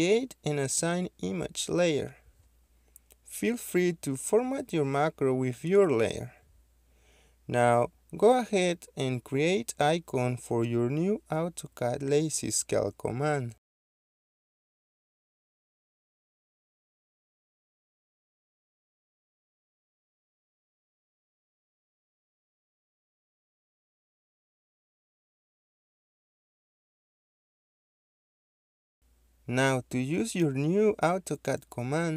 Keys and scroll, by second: 26.0 Caps_Lock, 26.1-27.9 typing.